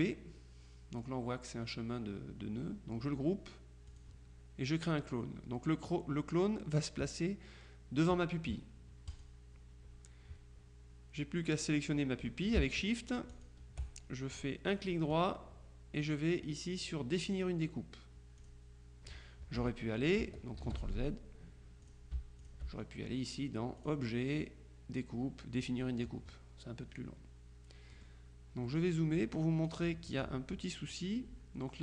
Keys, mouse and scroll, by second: 4.0 click, 9.2 click, 13.4 shift+click, 15.2 right click, 18.5 click, 20.7 ctrl+z, 21.9-23.1 shift+drag, 23.9 click, 25.6 click, 28.1 click, 28.8 click, 29.8 click.